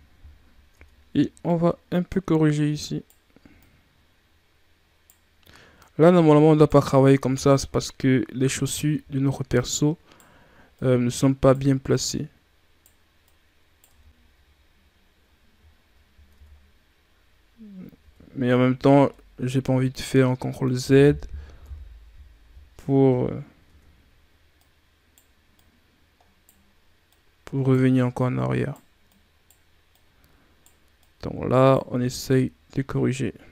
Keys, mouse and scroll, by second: 0.1 scroll up 4, 0.6 Tab, 1.4 right click, 3.4 right click, 5.7 right click, 7.1 Tab, 7.6-8.2 scroll down 4, 8.2-8.7 scroll up 4, 8.7 Tab, 9.4 right click, 10.6 right click, 11.8 right click, 13.1 right click, 13.8 Tab, 14.2 scroll down 5, 15.1-16.2 scroll up 5, 16.2 Tab, 17.9 Tab, 18.9 scroll down 1, 19.0-21.5 middle drag, 21.5 KP_3, 22.6 scroll up 2, 23.5 Tab, 24.5 right click, 25.5 right click, 27.0 right click, 28.0 right click, 29.0 right click, 29.8 right click, 30.9 right click, 31.8 Tab, 32.2 scroll down 2.